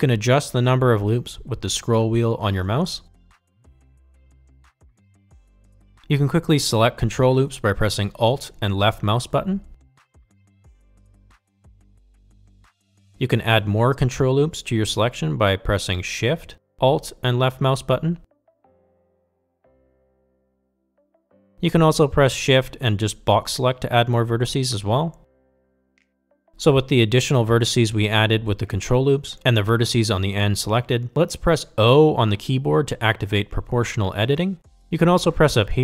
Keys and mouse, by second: 7.4 click, 8.8 middle click, 10.3 middle click, 12.5 alt+click, 16.7 alt+shift+click, 19.0 alt+shift+click, 20.2 alt+shift+click, 21.1 middle click, 22.4 alt+shift+click, 22.8 ctrl+z, 23.3 KP_1, 24.1 shift+middle click, 26.1-28.0 shift+drag, 34.6 o.